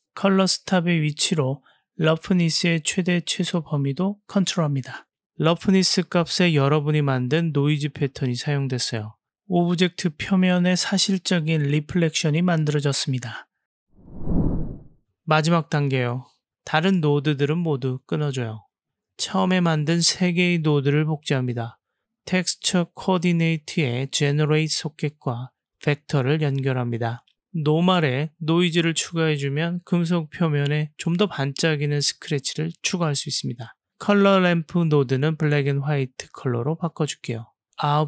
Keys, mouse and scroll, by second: 1.4-2.7 drag, 4.3 click, 6.2 click, 8.1 click, 10.1 click, 10.3-10.8 drag, 12.4-13.5 drag, 16.9 click, 17.6-18.0 drag, 18.4 click, 18.5 click, 20.5 middle click, 21.0-21.4 drag, 21.9 shift+d, 23.3 middle click, 24.1-25.1 drag, 25.7-26.4 drag, 26.5-27.6 drag, 29.4-29.9 drag, 30.5 g, 32.3 click, 33.0 Delete, 33.4 click, 34.3 shift+d, 35.9-36.5 drag, 37.3-37.9 drag.